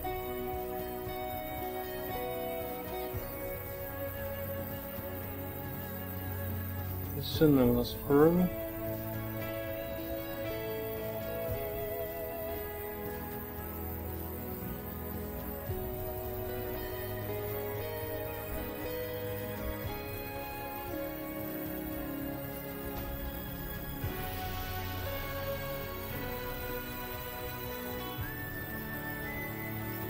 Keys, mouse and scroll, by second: 0.0-1.3 middle drag, 2.0-3.2 drag, 6.1-7.4 drag, 7.9-9.5 drag, 9.9 ctrl+middle click, 10.6 ctrl+shift+middle click, 11.9-13.9 drag, 14.4 click, 15.5 click, 16.8-19.1 drag, 19.4 click, 20.3-22.6 drag, 22.9 ctrl+middle click, 23.6 ctrl+middle click, 24.5 ctrl+middle click, 25.8 ctrl+s, 27.2 shift+middle click, 28.7 ctrl+middle click.